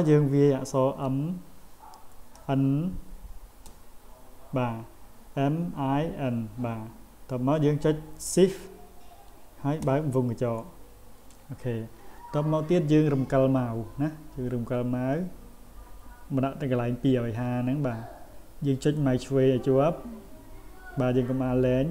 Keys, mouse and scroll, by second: 19.0-21.9 drag.